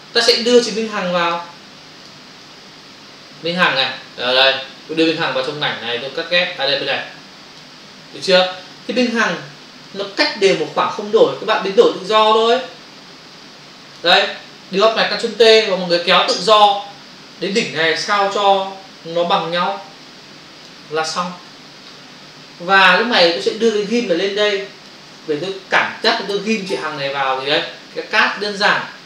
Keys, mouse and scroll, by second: 1.3 click, 2.0 click, 2.1 double click, 2.3 click, 5.1 click, 9.8 click, 17.4 click, 21.4 Return, 24.1 ctrl+click, 25.4 click, 25.8 ctrl+click, 26.9 ctrl+space, 27.0 ctrl+click, 27.1 ctrl+space, 28.3 space.